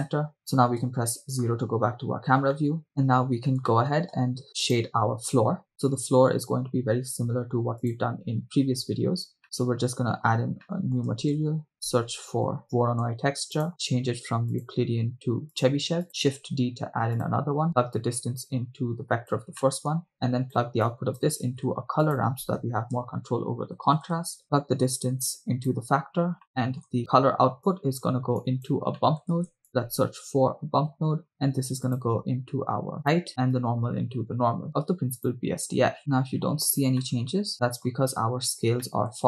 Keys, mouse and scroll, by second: 1.0 KP_0, 2.0-2.5 scroll down 2, 2.7 middle click, 3.6 scroll up 1, 3.8-4.3 shift+middle drag, 4.9-5.6 right drag, 7.8-8.4 drag, 9.6 scroll up 2, 9.6 middle click, 10.7 middle click, 11.4 shift+a, 13.7 scroll up 2, 14.8-15.8 drag, 16.6 shift+d, 17.3 click, 18.0-19.4 drag, 19.7 middle click, 20.2-20.6 drag, 20.9 click, 21.6 shift+a, 23.7 BackSpace, 25.3 click, 26.5 middle click, 27.0-27.4 scroll down 2, 28.0 drag, 29.0 middle click, 29.5 shift+a, 33.0 drag, 33.7-35.6 drag, 36.3 middle click, 36.3 scroll down 1, 37.0 middle click, 38.5-38.8 scroll up 2, 38.8 middle click.